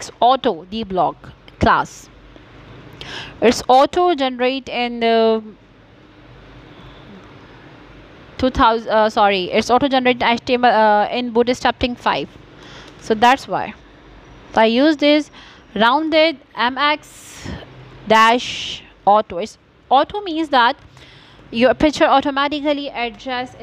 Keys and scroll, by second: 2.6 space, 6.0 m, 8.9 a, 11.1 o, 12.8-14.4 typing, 15.5 BackSpace, 16.3 c, 16.7 k.